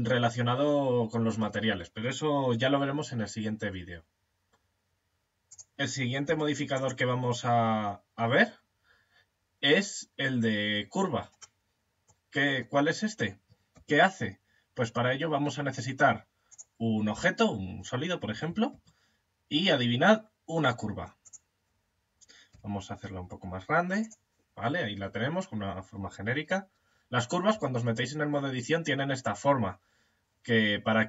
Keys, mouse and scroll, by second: 4.9 click, 5.7 x, 11.3 middle click, 13.1 shift+a, 18.1 shift+a, 22.0 s, 27.0 Tab.